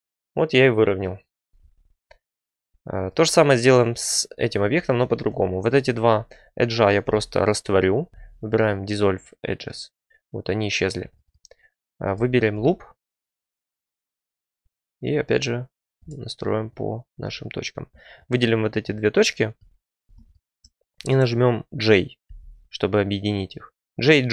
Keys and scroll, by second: 7.0 x, 17.0 1, 22.2 j.